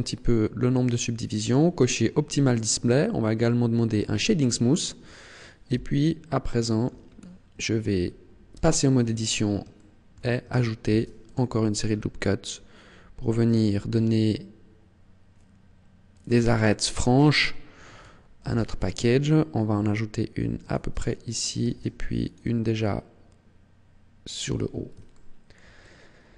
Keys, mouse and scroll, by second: 1.4 click, 4.0 click, 5.7 t, 6.4 shift+middle click, 7.0 scroll up 2, 7.5-8.0 scroll down 1, 8.5 Tab, 9.7 shift+middle click, 10.9 ctrl+r, 16.1 click, 16.7 shift+middle click, 18.4 ctrl+r, 20.7 click, 21.6 ctrl+r, 24.5 click, 25.1 shift+middle click, 25.8 middle click.